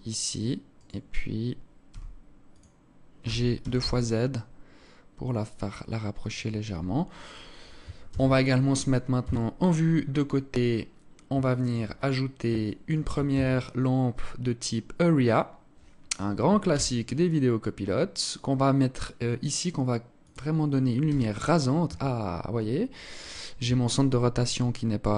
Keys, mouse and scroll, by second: 0.3 right click, 1.5 g, 7.7 ctrl+s, 8.8 KP_3, 9.5 scroll down 4, 10.1-10.7 scroll down 5, 11.1 alt+shift+click, 11.5 scroll down 1, 12.3 alt+shift+click, 12.9 shift+a, 16.3 g, 20.7 r.